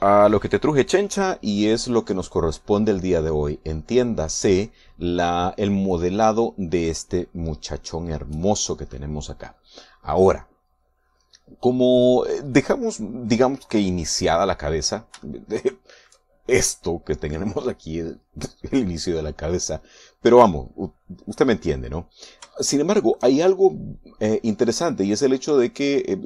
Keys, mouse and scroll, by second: 16.3-17.6 shift+middle drag, 23.6 shift+middle click.